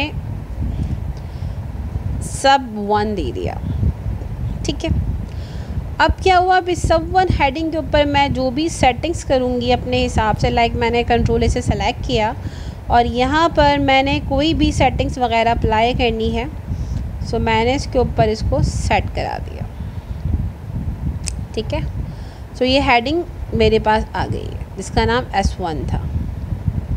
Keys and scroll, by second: 10.9 ctrl+a.